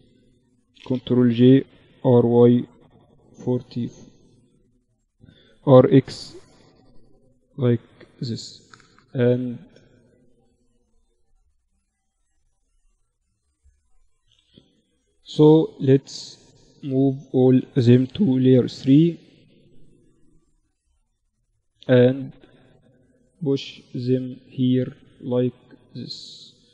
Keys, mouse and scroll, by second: 0.3 ctrl+j, 1.0 r, 3.5 z, 4.4 r, 6.1 z, 6.9-8.1 drag, 7.5 z, 11.9 middle click, 15.1 middle click, 15.7 a, 15.9 a, 17.0 m, 19.1-20.9 drag, 20.1 middle click, 20.1 right click, 20.9 middle click, 21.5-23.3 drag, 21.5 right click, 24.7-26.7 middle drag.